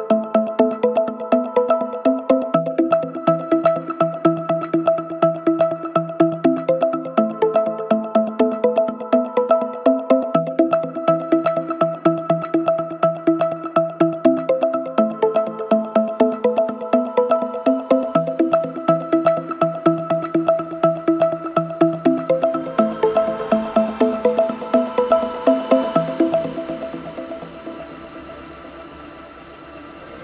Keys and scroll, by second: 12.2 9, 12.4 Return, 14.5 3, 14.6 2, 15.0 Return, 16.1 2, 16.3 Return, 21.9 /.